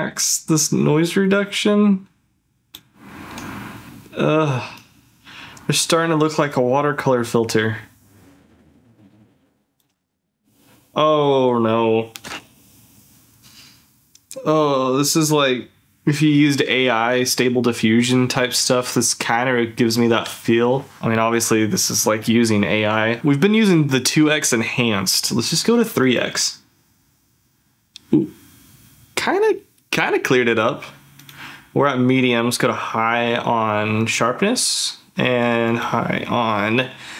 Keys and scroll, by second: 10.2 ctrl+f.